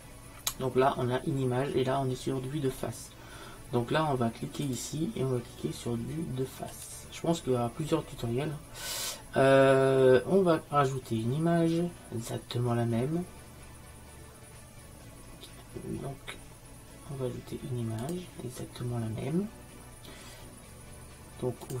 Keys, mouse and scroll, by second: 4.7-6.5 drag, 18.1-21.8 drag.